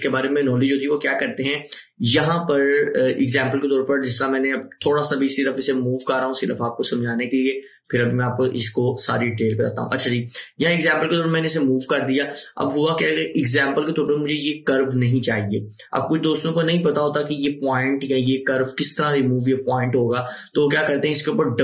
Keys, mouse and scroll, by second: 4.7-12.7 drag.